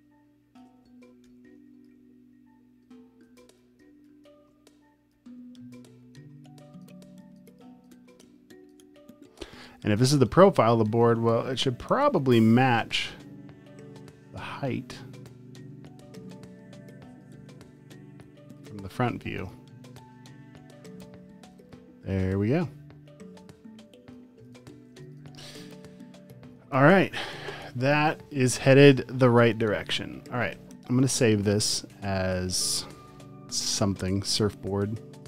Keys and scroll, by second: 0.3 super+space, 1.3 super+r, 3.5 space, 3.9 space, 4.2 space, 4.5 space, 7.0 space, 7.5 space, 7.9 space, 9.7-10.7 typing, 24.8 space, 26.3 space, 26.5 space, 27.0 v, 30.6 super+s.